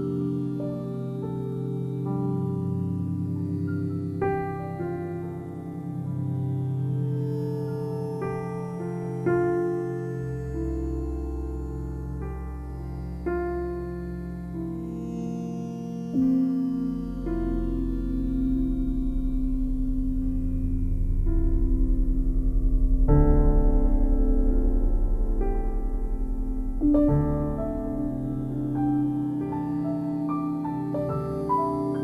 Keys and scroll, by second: 3.0 space, 6.9 space, 14.6 space, 17.4 [, 22.7 space, 24.9 ].